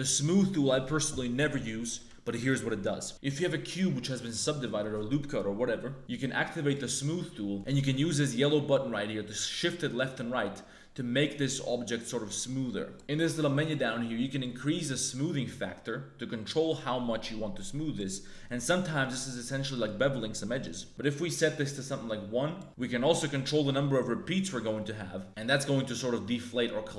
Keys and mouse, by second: 3.2 middle click, 4.0 middle click, 4.2 shift+middle click, 4.5 middle click, 7.2 middle click, 7.5 ctrl+z, 8.1 middle click, 8.7-12.9 drag, 14.4-18.0 drag, 18.3 click, 18.8 middle click, 19.1 middle click, 19.7 middle click, 20.5 middle click, 20.9-22.5 drag, 23.7-26.9 drag.